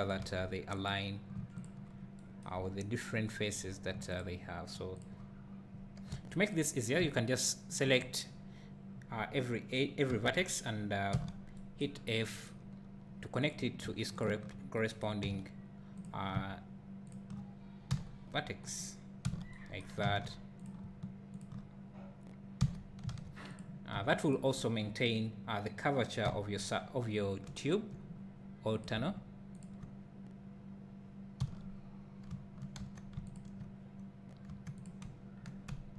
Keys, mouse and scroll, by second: 0.2 alt+a, 0.9 click, 1.6 shift+click, 2.6 scroll up 1, 4.2 shift+click, 6.1 1, 6.5 click, 7.8 shift+click, 10.1 j, 11.1 f, 11.9 scroll down 1, 12.7-13.5 scroll up 1, 13.5 click, 14.2 shift+click, 15.2 f, 16.0 click, 17.1 shift+click, 17.9 g, 19.2 f, 20.1 alt+a, 20.6 click, 21.4 shift+click, 22.6 f, 23.1 alt+a, 23.5 click, 24.3 shift+click, 26.2 f, 28.8 click, 29.6 shift+click, 31.4 f, 32.8 2, 33.3 alt+click, 34.5 1, 34.8 click.